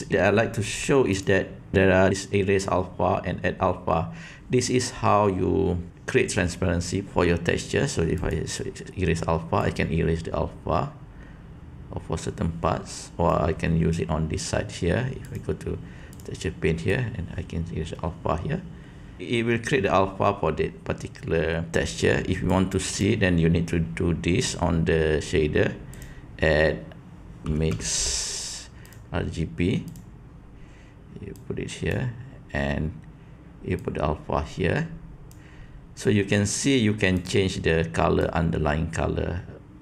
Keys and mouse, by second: 1.2-8.4 drag, 9.6-13.3 drag, 15.2-16.2 drag, 16.9-19.2 drag, 22.4-23.0 drag, 26.0-29.9 drag, 31.3-31.9 drag, 33.7-35.3 drag, 37.1 click.